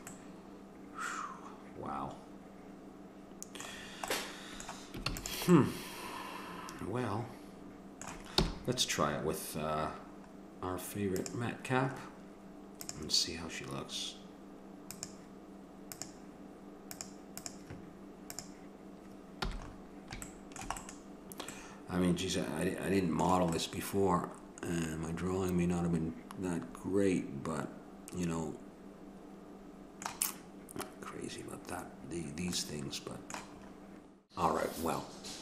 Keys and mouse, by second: 0.7-2.0 middle drag, 4.2 middle click, 5.1 ctrl+s, 8.4 n, 11.2-14.7 drag, 14.9-17.4 drag, 17.4 right click, 18.4 click, 19.4 n, 20.4 middle click, 24.6 middle click, 32.6-33.7 middle drag, 33.7 click.